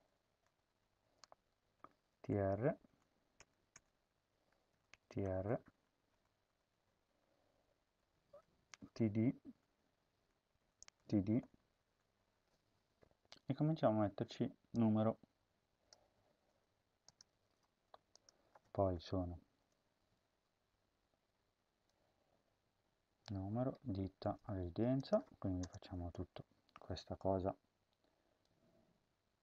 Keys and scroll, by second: 0.4 Up, 0.6 Tab, 1.8-2.8 typing, 3.4 Return, 3.6 Return, 4.0-6.1 typing, 6.4 Tab, 6.6 Tab, 8.0-8.9 typing, 10.3-11.4 typing, 16.2 ctrl+c, 17.2 ctrl+v, 24.2 ctrl+x, 25.6 Return, 25.8 Home, 26.2 ctrl+v.